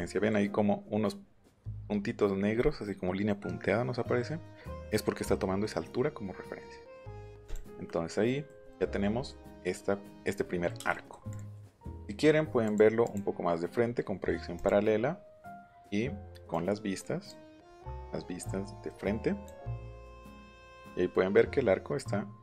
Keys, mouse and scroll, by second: 0.6 middle click, 1.4-5.9 drag, 7.4 click, 8.6 middle click, 10.3 scroll up 1, 10.8 scroll down 1, 11.3 click, 12.6 click, 13.0 click, 14.5 click, 16.5 click, 17.7-19.4 drag, 19.8 click, 20.7 scroll up 1.